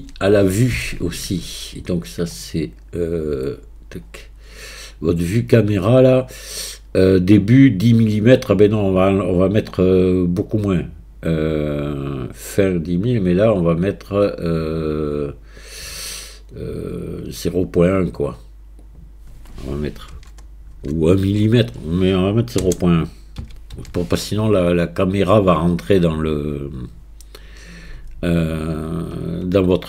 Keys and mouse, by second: 5.6 click, 13.7-25.2 drag.